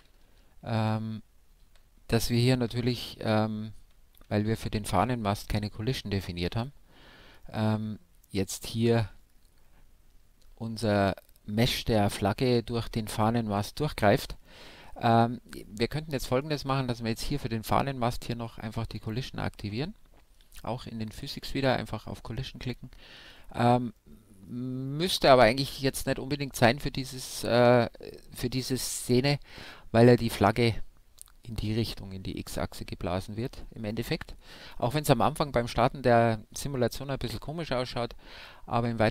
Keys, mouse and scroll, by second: 5.6 Right, 7.0-9.1 middle drag, 11.7-13.5 middle drag, 14.0-18.5 middle drag, 16.0-18.5 right drag, 18.5-22.3 drag, 19.3-26.5 middle drag, 29.9-39.1 middle drag.